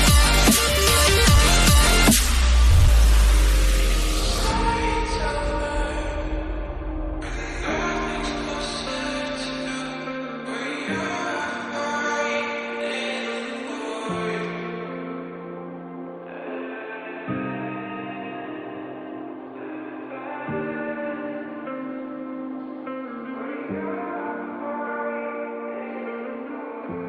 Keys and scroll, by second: 6.1 Down, 8.7 ctrl+a, 8.8 ctrl+d, 12.2 ctrl+d, 13.2 ctrl+a, 17.1 ctrl+a.